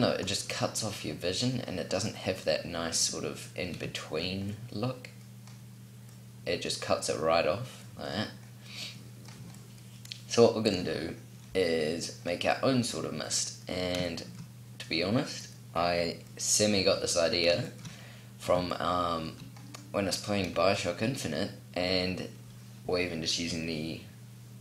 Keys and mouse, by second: 0.5 middle click, 10.5-13.0 middle drag.